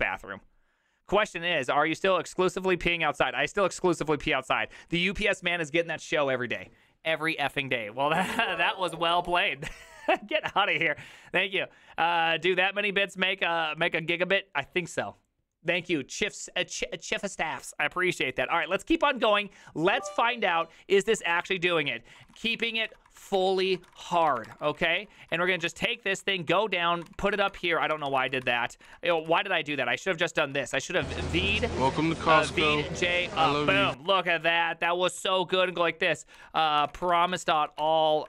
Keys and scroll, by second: 23.2-30.8 typing, 28.9 ctrl+c, 30.5 ctrl+c, 32.3-38.2 typing, 33.4 ctrl+c.